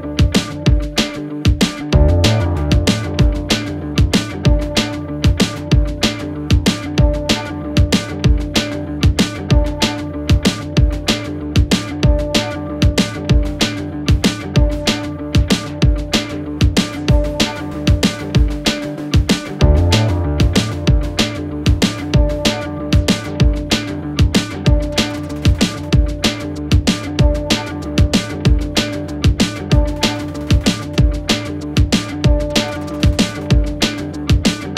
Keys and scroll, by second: 2.5 Delete, 8.0 F1, 11.4 2, 17.1 4, 23.0 3, 23.3 ], 24.8 4, 28.2 1, 30.3 3, 30.5 ], 31.4 4.